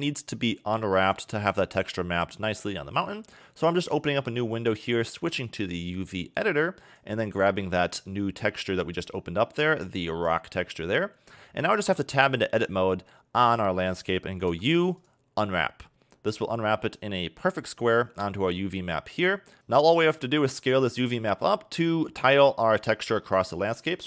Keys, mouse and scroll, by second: 3.4 click, 6.4 click, 7.5 click, 10.9-12.5 scroll down 5, 12.5 Tab, 14.5 u.